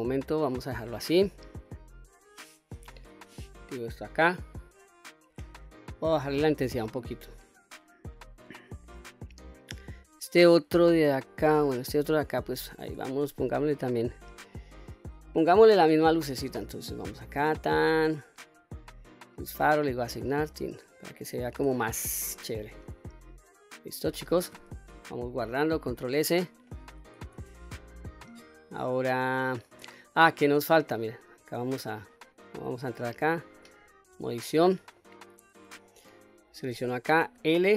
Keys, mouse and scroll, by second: 0.8-1.3 middle drag, 2.3 click, 3.2-3.6 middle drag, 3.9-4.7 scroll up 2, 4.7-5.2 scroll down 1, 6.4-7.7 drag, 8.9 middle click, 9.6-10.6 scroll up 2, 12.0 click, 13.0 Tab, 13.6 click, 14.6 shift+click, 17.5 click, 18.9 click, 19.8 click, 20.5 click, 21.0 scroll down 1, 22.0 Tab, 22.0-22.8 scroll down 1, 22.8-23.9 middle drag, 25.4 ctrl+s, 27.7-28.1 shift+middle drag, 28.5-28.9 scroll up 1, 28.9-30.2 middle drag, 31.0 click, 32.2 click, 33.3 Tab, 33.8 scroll up 1, 34.7 middle click, 36.0 click, 37.3 l.